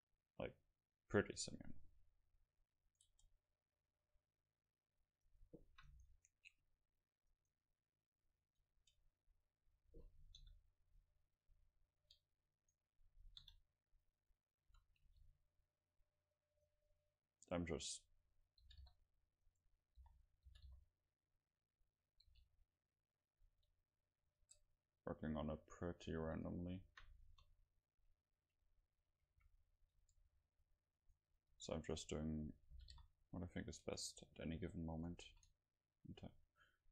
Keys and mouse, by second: 1.0-5.3 middle drag, 2.9-4.9 right drag, 4.3 Tab, 5.3-6.3 drag, 6.3-9.2 right drag, 8.7 Tab, 9.2-10.4 middle drag, 10.4 KP_Decimal, 11.1 middle click, 12.2 Tab, 12.8 right click, 13.8 KP_Decimal, 14.7 a, 15.1 c, 16.7-18.5 drag, 18.7 g, 20.1 o, 20.6 g, 22.4 r, 23.6 g, 24.5 Tab, 25.4 a, 26.3 ctrl+s, 27.5 KP_0, 29.3 a, 29.4 a, 30.0 Tab, 31.2 right click, 31.7-32.9 right drag, 32.9 g, 33.9 Tab, 34.0-36.0 drag, 34.5 a, 35.3 a, 35.3 ctrl+s, 36.8-36.9 middle drag.